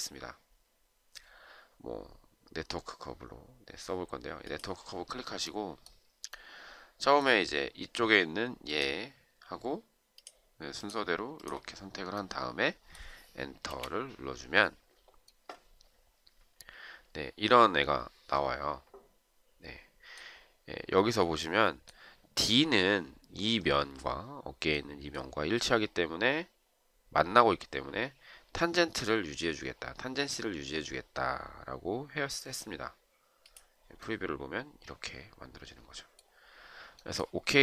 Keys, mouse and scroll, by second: 13.6 Return.